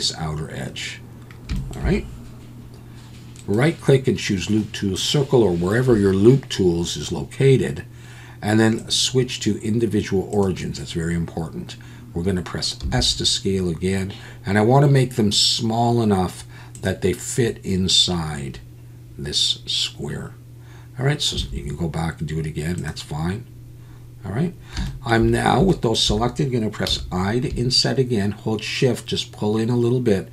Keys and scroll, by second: 12.8 s, 21.3 s.